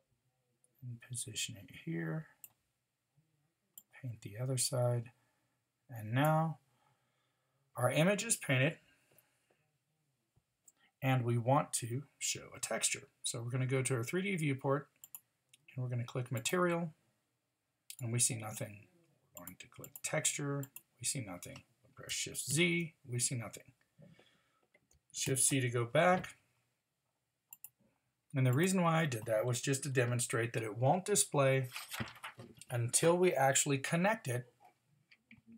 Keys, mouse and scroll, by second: 22.5 shift+z, 25.2 shift+z.